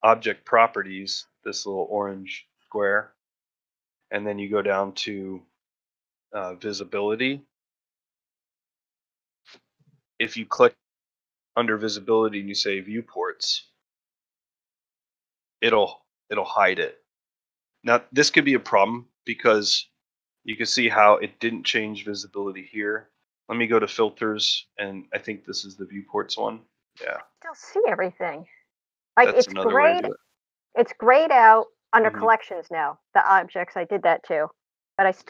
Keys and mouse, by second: 9.7 click, 10.2 click, 14.6 click, 23.3-27.3 drag, 28.6-30.0 drag, 31.8 click.